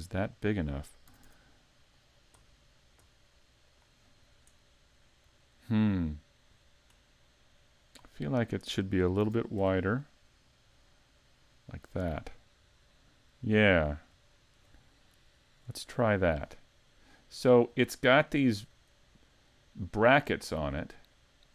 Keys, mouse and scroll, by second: 0.1 middle click, 1.2 s, 3.8 click, 4.1 scroll down 3, 4.6 middle click, 5.4 shift+middle click, 6.5-6.9 scroll down 3, 7.0 middle click, 8.1 scroll up 3, 9.2 s, 11.7 click, 12.1-12.6 scroll down 2, 12.9 middle click, 13.9-14.3 scroll up 2, 14.3 shift+middle click, 18.2-18.9 scroll up 2, 18.9 shift+middle click, 20.3-20.9 scroll down 3, 20.9 shift+middle click.